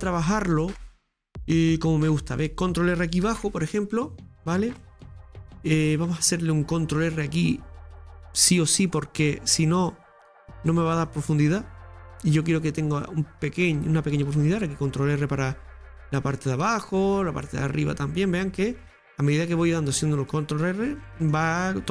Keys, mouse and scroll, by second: 1.7-3.2 scroll up 2, 4.8-8.1 middle drag, 8.1 ctrl+r, 10.7 ctrl+r, 20.3-21.9 middle drag.